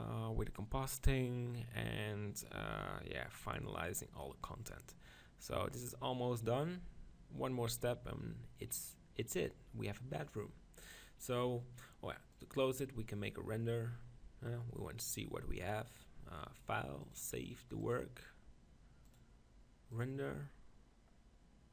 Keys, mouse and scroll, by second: 12.3-14.2 drag, 17.4-20.9 drag.